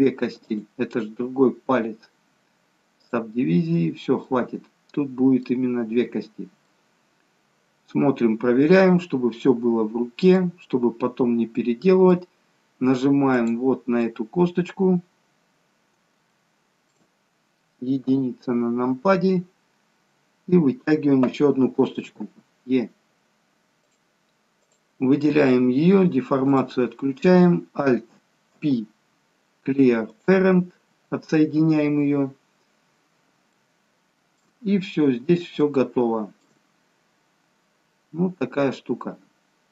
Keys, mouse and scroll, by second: 0.4 click, 4.2 middle click, 6.1-6.6 scroll down 1, 6.6 middle click, 10.6-11.6 scroll down 4, 11.6 middle click, 11.6 scroll down 1, 13.3 click, 14.0 middle click, 16.3 shift+middle click, 18.2 KP_1, 19.5-20.0 scroll up 5, 22.2 e, 23.9 e, 28.4 alt+p, 31.7-33.2 scroll down 2, 33.5 shift+middle click, 33.5 scroll down 1, 34.9-35.6 scroll down 1, 35.8 shift+middle click, 35.8 scroll down 1, 36.9-37.6 scroll up 1, 37.6-38.4 scroll down 1, 38.4 middle click.